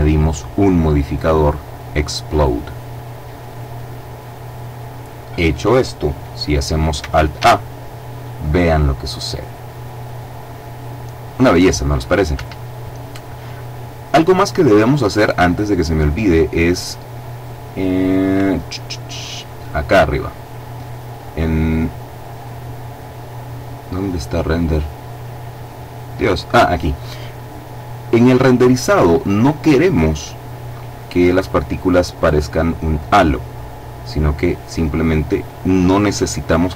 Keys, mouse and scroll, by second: 3.0 click, 6.9 alt+a, 11.9 Escape, 15.3 click, 16.5-16.9 scroll down 2, 17.3-17.9 scroll up 2, 18.1-19.6 scroll up 2, 20.7-21.9 drag, 22.1-22.9 scroll down 2, 23.0-24.1 scroll down 2.